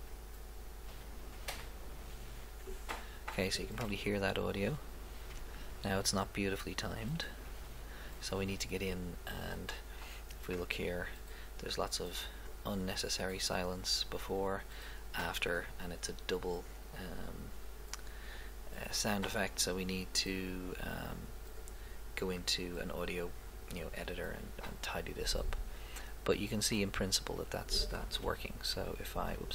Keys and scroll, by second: 0.1 Left, 3.8 Right, 6.2 Left, 28.2 Left.